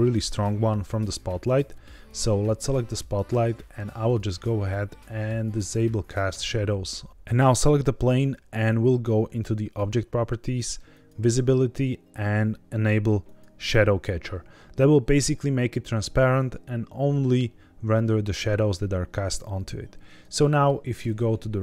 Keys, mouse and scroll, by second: 2.0 click, 4.0 click, 6.2 click, 7.2 click, 9.7 click, 10.8 click, 11.3-13.1 scroll down 3, 13.1 click, 20.3 shift+middle click.